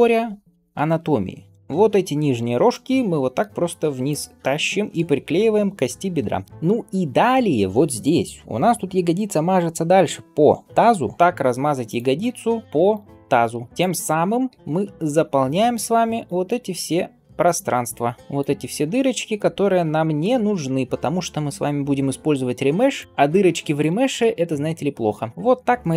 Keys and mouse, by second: 1.6 click, 1.6 middle click, 1.6 g, 3.5 g, 11.2 g, 11.7 click, 11.7 middle click, 12.1 g, 13.7 g, 14.3 g, 17.5 g, 18.2 click, 18.2 middle click, 19.8 click, 21.0 g, 24.5 g.